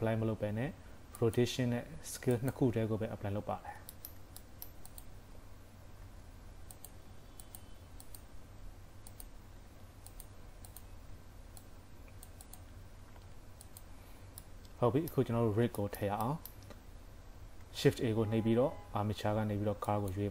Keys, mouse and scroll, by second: 1.8 ctrl+a, 3.6 scroll down 3, 3.9 shift+middle click, 4.5 middle click, 4.9 click, 5.4-5.9 scroll up 3, 6.1 ctrl+a, 7.2 ctrl+a, 8.1 click, 8.5 ctrl+a, 10.7 click, 11.2 ctrl+a, 14.1 scroll down 2, 14.3 KP_3, 14.5 middle click, 15.5 scroll up 1, 15.8 shift+middle click, 16.3 middle click, 17.7 shift+a.